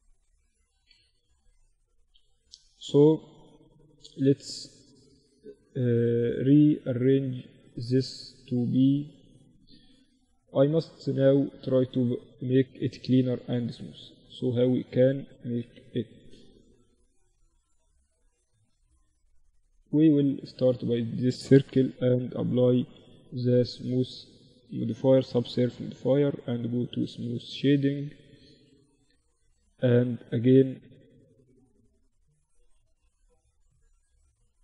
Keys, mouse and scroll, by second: 0.2 Tab, 0.6 Tab, 2.2 z, 2.4 z, 4.3 a, 4.8 a, 9.4-13.3 right drag, 10.2-11.2 drag, 13.8-15.3 drag, 13.8-15.5 right drag, 15.1 KP_1, 15.3 z, 17.0 z, 18.0 z, 18.1-21.4 right drag, 19.8 z, 21.6 ctrl+2, 24.2-25.6 middle drag, 25.0 t, 25.6-27.4 drag, 25.9 t, 26.6 Tab, 27.4 ctrl+r, 30.3 ctrl+r, 31.5 z, 32.1 z, 32.5 Tab, 32.8 Tab, 33.6 ctrl+r.